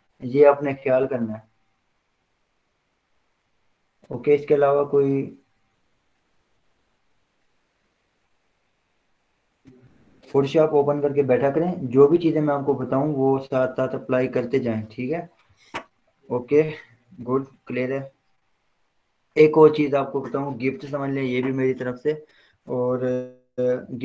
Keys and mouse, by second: 21.9 click.